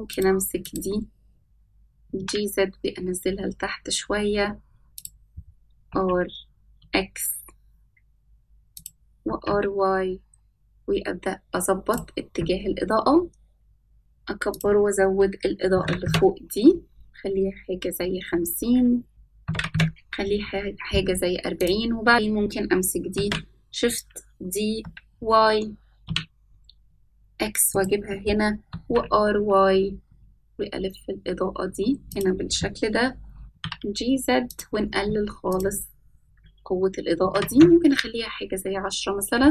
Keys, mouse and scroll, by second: 0.2 click, 1.4 click, 2.7 click, 3.6 g, 7.5 r, 10.8 r, 13.8 s, 16.4-17.9 drag, 20.8-22.1 drag, 24.0 drag, 25.7 shift+d, 30.7 s, 31.2 r, 36.0 g, 38.0-39.5 drag.